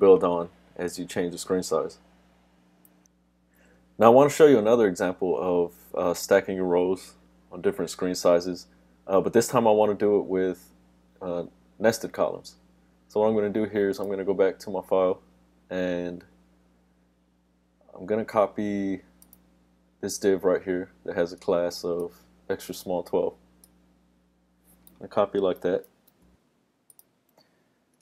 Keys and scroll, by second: 25.9 super+c.